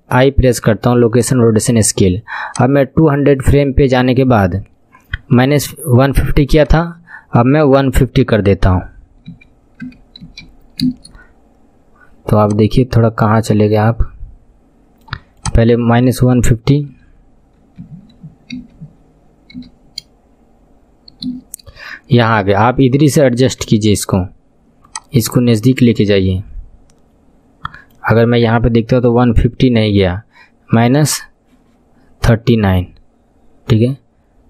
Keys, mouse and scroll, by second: 0.5 i, 1.3 i, 2.5-22.6 drag, 23.6 n, 24.8-27.8 drag, 28.4 n.